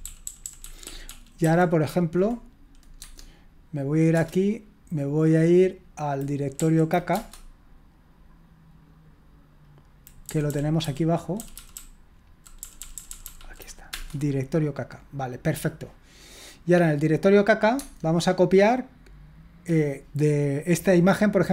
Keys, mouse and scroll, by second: 0.0 Up, 0.2 Up, 0.4 Up, 0.6 Up, 1.0 Up, 1.4 Up, 3.0 Tab, 4.1 Return, 6.5 Up, 7.1 Return, 10.3 Down, 10.5 Down, 10.8 Down, 11.4 Down, 11.5 Down, 12.4 Down, 12.6 Down, 12.8 Down, 12.9 Down, 13.1 Down, 13.2 Down, 13.3 Down, 13.9 Return, 17.8 Tab.